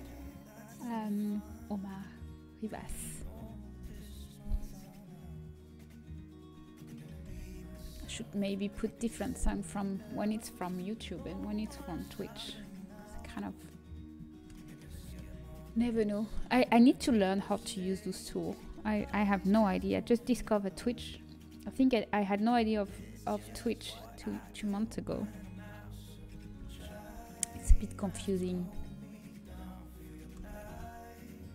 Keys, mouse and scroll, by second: 3.7 l, 9.6 s, 15.2-17.7 middle drag, 26.3 s.